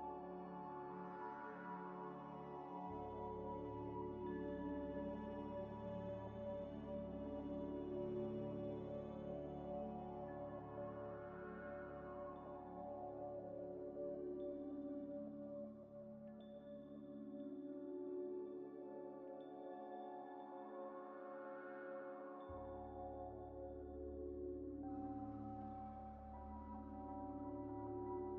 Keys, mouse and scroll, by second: 0.0-1.5 typing, 1.4 scroll up 1, 1.8-2.2 scroll down 2, 2.4 shift+click, 3.7 shift+click, 4.5 shift+click, 6.0 shift+click, 8.5 middle click, 8.9 scroll down 1, 9.4 ث, 10.0 e, 11.3 s, 12.2 z, 12.7 middle click, 13.4 2, 13.6 alt+click, 14.5 alt+shift+click, 15.8 alt+shift+click, 16.6 alt+shift+click, 17.5 alt+shift+click, 18.0 ctrl+b, 18.9 ctrl+scroll, 19.6 ctrl+z, 20.5 double click, 21.2 Tab, 22.1 right click, 22.8 middle click, 22.9 Tab, 23.3 2, 23.8 alt+click, 24.8 alt+click, 25.1 middle click, 25.1 scroll down 1, 25.4 ctrl+y, 25.6 ctrl+z, 27.8 Tab, 28.2 middle click, 28.2 middle click.